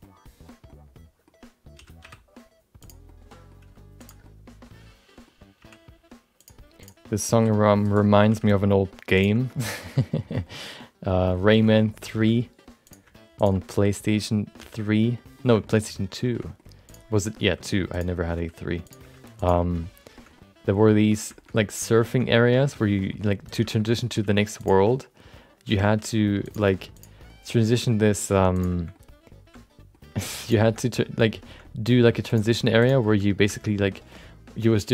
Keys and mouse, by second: 0.1 middle click, 0.8 middle click, 1.7 r, 3.2 middle click, 3.9 g, 4.3-5.3 middle drag, 5.6 e, 6.8 click, 7.0 middle click, 7.3 s, 8.3 g, 9.4 shift+middle click, 9.9 middle click, 10.6 middle click, 11.7 middle click, 12.2 middle click, 12.8 click, 13.3 shift+click, 14.6 f, 15.1 middle click, 15.6 shift+middle click, 15.8 middle click, 16.3 shift+middle click, 16.4 middle click, 16.8 click, 17.1 middle click, 17.4 g, 18.2 middle click, 18.3 r, 19.0 g, 19.9 middle click, 20.4 middle click, 21.4 middle click, 22.1 shift+middle click, 22.4 middle click, 22.7 middle click, 23.5 click, 23.7 middle click, 23.8 middle click, 24.2 g, 25.0 middle click, 25.8 r, 26.6 g, 27.4 middle click, 27.9 middle click, 28.5 click, 28.9-29.9 middle drag, 30.0 g, 30.7 middle click, 31.7 middle click, 32.3 click, 32.8 shift+click, 33.0 f, 33.2 middle click, 33.6 middle click.